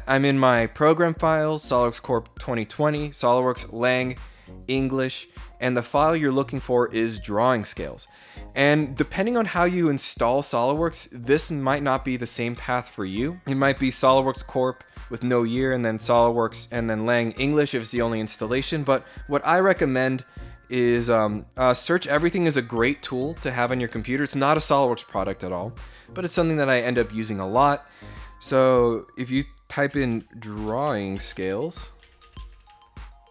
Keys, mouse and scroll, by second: 20.6 click, 30.3-32.6 typing.